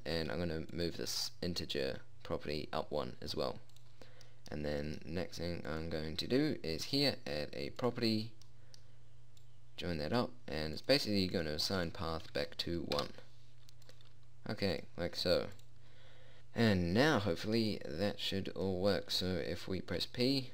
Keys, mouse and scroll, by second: 1.3-3.1 drag, 4.3 click, 4.8-7.3 middle drag, 9.0 middle click, 9.9-17.5 drag.